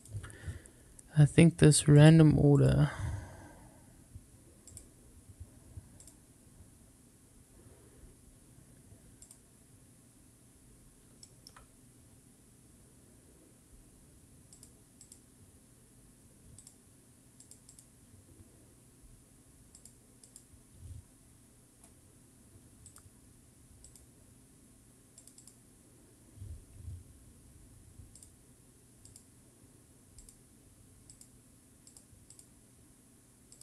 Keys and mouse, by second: 1.9 click, 2.5 click, 4.6 click, 6.0-7.1 drag, 9.2 click, 11.2 shift+middle click, 14.5 click, 15.0 click, 16.6 click, 17.4 click, 17.7 click, 19.7 click, 20.2 click, 22.8 click, 23.8 click, 25.1 click, 25.3 click, 28.2-29.1 drag, 30.2-31.2 drag, 31.8 click, 33.5-33.6 drag.